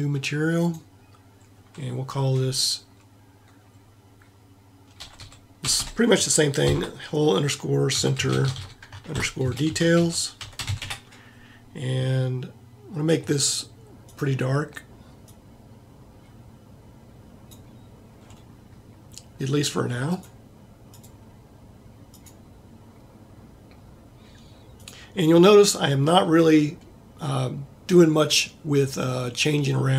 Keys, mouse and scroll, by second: 5.8 l.